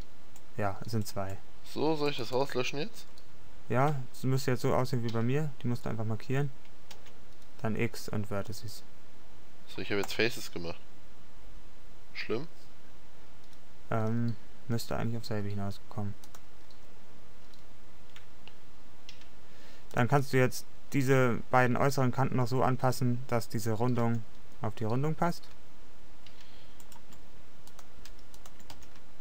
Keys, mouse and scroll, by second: 7.1 x, 11.6 middle click, 13.2-14.8 middle drag, 16.3-18.6 middle drag, 20.0 middle click, 20.7 middle click, 20.8 click, 24.1 g, 25.0 click, 28.9 g.